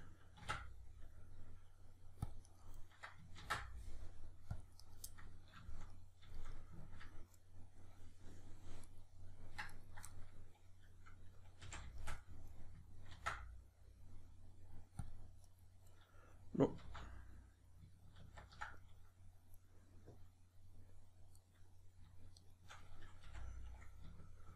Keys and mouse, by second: 0.4 ctrl+r, 2.6 right click, 2.8-8.9 middle drag, 3.4 ctrl+r, 4.9 right click, 8.9 right drag, 9.7 shift+right click, 10.2-15.6 middle drag, 11.6 f, 13.1 ctrl+r, 15.6 right click, 16.0-21.3 middle drag, 16.8 ctrl+z, 21.3 right click, 22.3 shift+right click, 23.2 f.